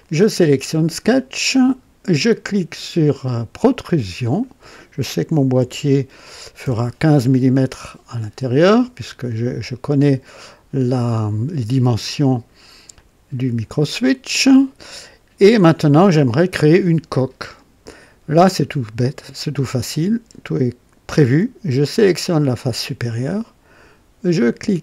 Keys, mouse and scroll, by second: 3.6 click, 5.5 KP_1, 6.6 KP_5, 12.9 click, 21.8 click.